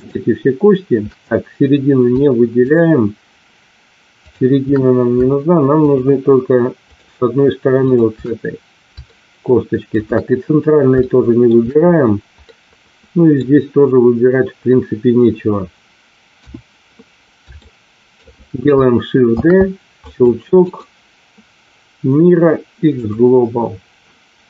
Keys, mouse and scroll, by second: 2.6 shift+click, 4.3 shift+click, 5.8 shift+click, 9.0 shift+middle click, 11.0 shift+middle click, 12.4 middle click, 16.3 KP_1, 17.5 shift+middle click, 19.3 shift+d, 20.0 click, 22.1-24.4 right drag.